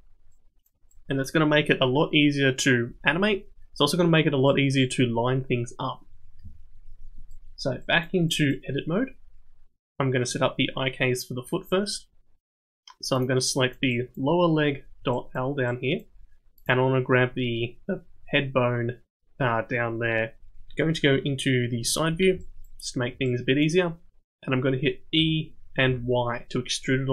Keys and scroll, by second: 6.4 Tab, 21.1 KP_3, 25.2 e.